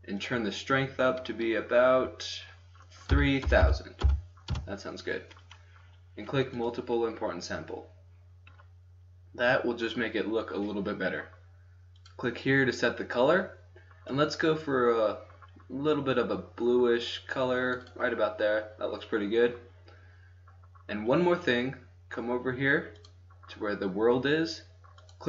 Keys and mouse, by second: 0.1-2.1 drag, 2.1-4.2 middle drag, 3.6 KP_0, 6.6 click, 6.9 click, 7.4-8.5 drag, 10.6-12.0 middle drag, 12.0-13.7 drag, 13.8 middle click, 23.0-25.2 drag.